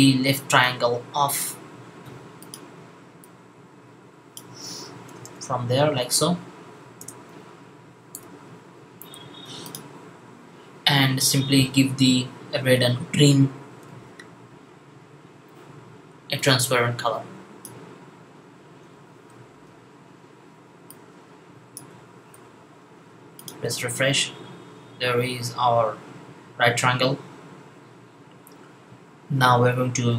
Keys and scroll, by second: 19.2 super+v, 22.2 super+v.